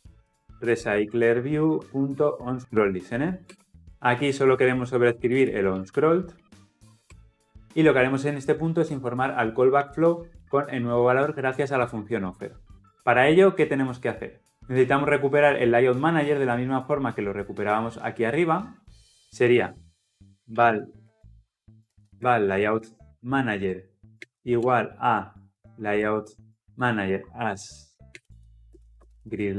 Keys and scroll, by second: 3.9 ctrl+alt+o, 4.6 ctrl+o, 19.1 ctrl+z, 23.6 Return, 27.1 Return.